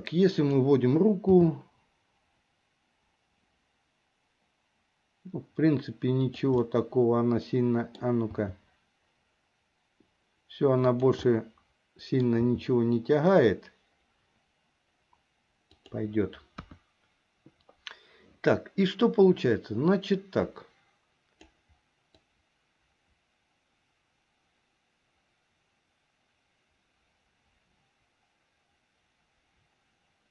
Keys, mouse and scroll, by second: 0.5 click, 1.5 g, 6.8-8.1 middle drag, 8.5 g, 11.4-12.4 middle drag, 12.6 g, 16.7 KP_1, 19.2-21.7 drag, 22.5-30.3 drag.